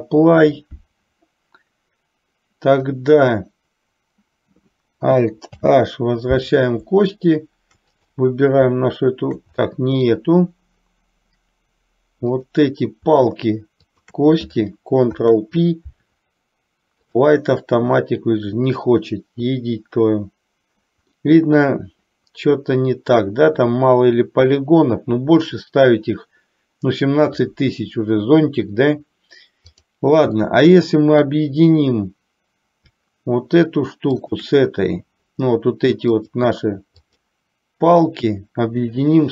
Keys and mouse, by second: 5.7 alt+h, 8.0 click, 9.6-10.2 middle drag, 13.9 shift+click, 15.1 ctrl+p, 21.4-23.4 middle drag, 29.7 click, 30.6-31.5 middle drag, 36.4 click, 37.2 click.